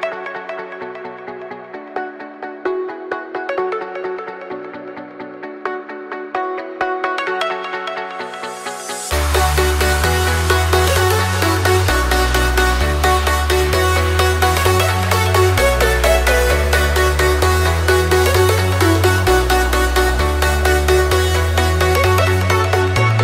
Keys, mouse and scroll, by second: 0.0-0.7 typing, 1.1 Return, 2.0 click, 3.8 F10, 4.9 click, 5.6 KP_1, 5.8 KP_8, 6.6 click, 6.9 KP_1, 7.3 KP_8, 7.9 click, 8.8 KP_8, 9.1 click, 10.6 right click, 13.7 click, 14.3 click, 15.0-18.4 typing, 19.4 click, 20.7 typing, 21.7 click.